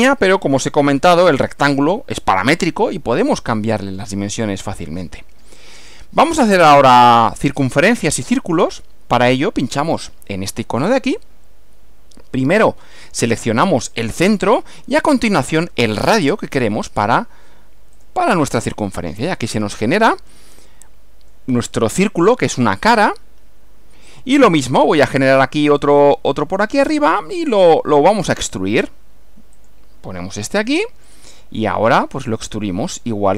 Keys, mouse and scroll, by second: 1.7 click, 4.0 click, 4.7-5.7 middle drag, 9.9 click, 14.1 click, 18.1 click, 18.8 click, 19.3-21.5 middle drag, 24.1 click, 27.1 click, 29.6 click, 31.1 click, 32.0 click.